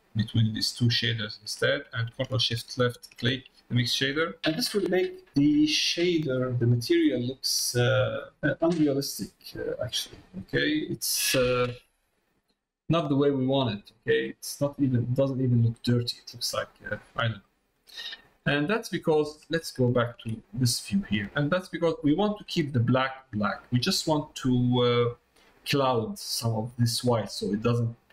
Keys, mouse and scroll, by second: 3.5 middle click, 12.1 middle click, 13.0 middle click, 13.7 middle click, 14.7 middle click, 15.6 middle click, 16.8 middle click, 18.3 middle click, 18.8 middle click, 19.8 ctrl+shift+click, 20.8 middle click, 21.6 middle click, 23.6 middle click, 25.2 middle click.